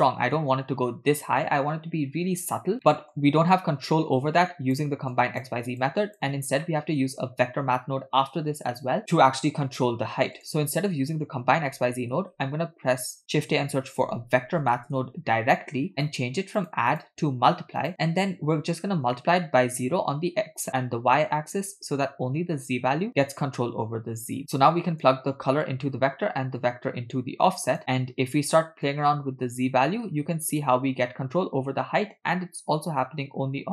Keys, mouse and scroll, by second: 0.0-0.5 middle drag, 3.0 middle click, 3.5-4.8 drag, 5.2 click, 5.9 click, 6.7 middle click, 10.4 click, 11.8 x, 12.2 shift+a, 16.9-18.3 drag, 24.4 click, 26.6-27.8 drag, 28.9-33.7 drag.